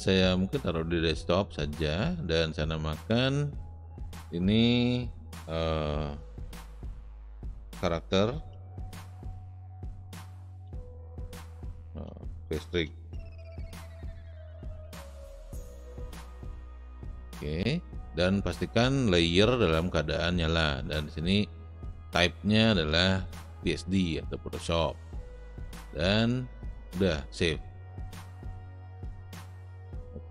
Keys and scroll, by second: 9.0-15.6 typing.